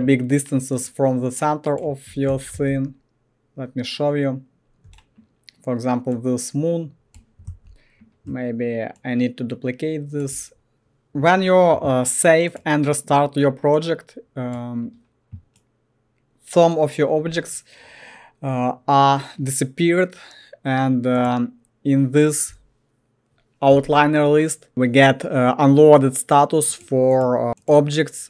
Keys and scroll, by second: 2.0-5.0 typing, 7.5 ctrl+z.